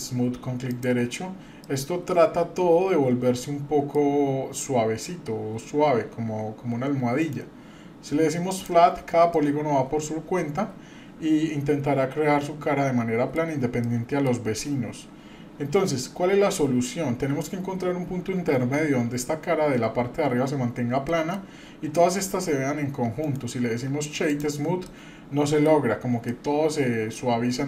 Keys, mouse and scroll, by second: 1.6-3.9 middle drag, 7.2-8.7 right drag, 9.3-13.4 middle drag, 13.8-14.3 middle drag, 21.1 middle click, 23.2-24.5 right drag, 24.8-25.7 middle drag, 26.3-27.6 middle drag.